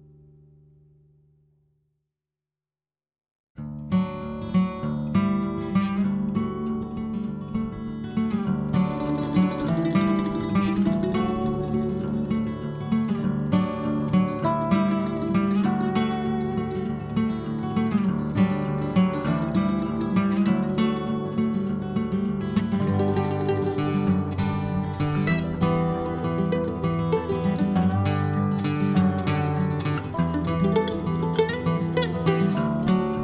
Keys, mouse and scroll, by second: 0.0 ctrl+click, 0.7 ctrl+click, 1.4 ctrl+click, 3.0 ctrl+click, 3.5 ctrl+click, 4.0 ctrl+click, 4.4 ctrl+click, 5.0 ctrl+click, 6.3 ctrl+click, 7.2 ctrl+click, 7.6 ctrl+click, 8.0 ctrl+click, 9.3-10.9 ctrl+scroll up 1, 11.1 shift+click, 11.9 shift+click, 13.0 click, 13.3 scroll down 1, 13.4-14.9 middle drag, 17.1-17.4 scroll up 2, 17.4 click, 17.8-18.7 scroll up 8, 18.7-21.5 drag, 22.0 p, 23.4 BackSpace, 23.4 BackSpace, 23.6 BackSpace, 25.2 p, 26.4 l, 29.8 click, 30.3-31.4 middle drag, 31.4-33.0 drag.